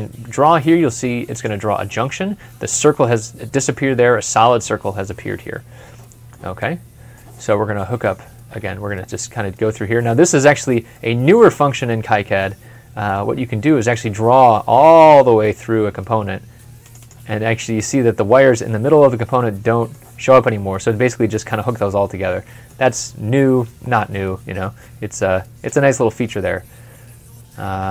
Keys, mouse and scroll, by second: 4.6 w, 4.8 scroll up 1, 5.0 scroll down 1, 5.8 scroll down 1, 5.9 middle click, 8.5 w, 10.8 middle click, 12.9 middle click, 16.8 middle click, 16.9 double click, 19.1 double click, 19.3 middle click, 20.5-20.9 scroll up 1, 20.9 scroll down 1, 21.5 middle click, 23.8 w, 26.9 scroll down 1, 27.2 scroll up 1.